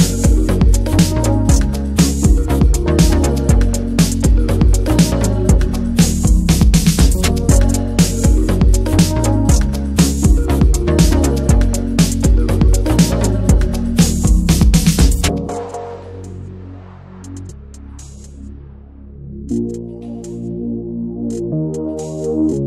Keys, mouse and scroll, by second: 0.0 scroll up 1, 0.2 shift+middle click, 1.1 alt+shift+click, 1.6 middle drag, 2.1 shift+middle click, 2.2-3.2 scroll up 2, 2.5 shift+middle click, 3.2 ctrl+b, 5.4 Tab, 5.8 click, 6.1 ctrl+a, 6.4 middle click, 6.6 ctrl+s, 6.8 shift+middle drag, 7.0 scroll up 3, 7.2 Tab, 7.5-8.4 shift+middle drag, 8.4 click, 9.1 alt+shift+click, 10.5 right click, 10.8 Tab, 11.0 Tab, 11.1 a, 11.4 right click, 12.1 Tab, 12.3-12.8 middle drag, 12.8 ctrl+s, 12.8 scroll down 2, 13.2 /, 13.6 click, 13.8 /, 14.0-14.4 middle drag, 14.4 Tab, 14.5 middle click, 15.3 click, 15.6-16.1 middle drag, 16.4 alt+shift+Left, 16.4 click, 16.6 middle drag, 16.7-17.5 scroll up 4, 16.8 shift+middle click, 17.1 middle click, 17.5-17.9 shift+middle drag, 17.9 alt+shift+click, 18.3 shift+middle click, 18.4-19.7 scroll up 1, 19.7 scroll up 1, 19.7 alt+shift+click, 19.9-20.5 shift+middle drag, 20.5 ctrl+b, 21.5-21.8 scroll down 6, 21.8 shift+middle drag, 22.0 Tab, 22.1-22.4 middle drag, 22.4 Tab, 22.5 middle click.